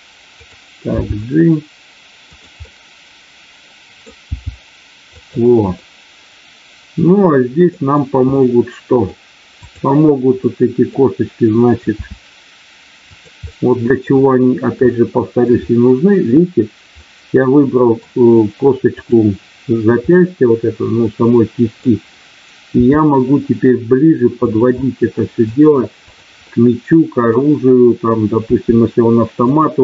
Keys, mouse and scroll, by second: 1.0 g, 2.2 click, 2.6-3.9 middle drag, 4.2 g, 5.2 click, 5.7-6.4 scroll up 1, 6.4-7.0 scroll up 1, 7.0 middle click, 8.2-9.0 scroll up 1, 10.4 middle click, 11.9 r, 13.0 click, 13.5 middle click, 14.9 shift+middle click, 15.7 middle click, 17.0-18.1 middle drag, 20.0-21.9 middle drag, 22.7 r, 24.4 click, 24.8 middle click, 26.5 middle click, 28.5 r, 29.5 click.